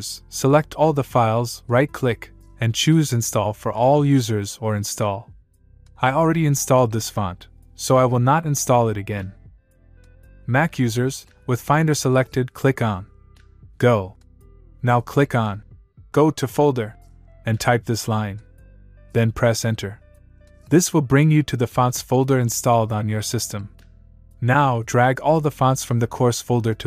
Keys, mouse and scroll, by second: 0.9 right click, 3.1 click.